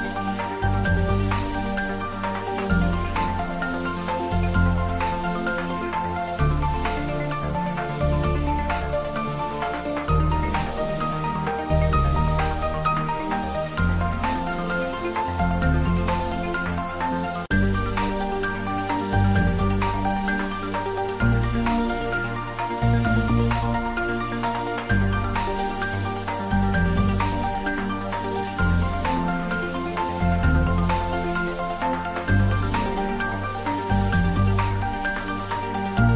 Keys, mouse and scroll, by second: 0.0 alt+e, 0.4 click, 2.7 click, 2.8 Tab, 3.5 s, 4.3 click, 4.9 r, 6.0 click, 6.7 middle click, 7.5-9.0 middle drag, 9.0 ctrl+3, 9.4 middle click, 10.3 click, 10.6 ctrl+middle click, 11.2 Tab, 12.0 a, 13.2 click, 13.4 middle click, 14.2 Tab, 14.9-16.3 middle drag, 16.3 s, 16.6 click, 17.8 middle click, 18.8 middle click, 19.5 ctrl+e, 19.9 click, 20.4 ctrl+e, 20.9 click, 22.1 ctrl+r, 22.4 click, 23.0 middle click, 24.2 d, 25.6 click, 25.8 ctrl+z, 26.7 click, 27.6 s, 29.3 click, 29.5 Tab, 30.0 ctrl+middle click, 30.7 s, 31.2 click, 31.4 Tab, 31.6 ctrl+middle click, 32.0 middle click, 33.0 Tab, 33.2 right click, 33.8 click, 34.1-35.9 middle drag, 35.9 ctrl+middle click.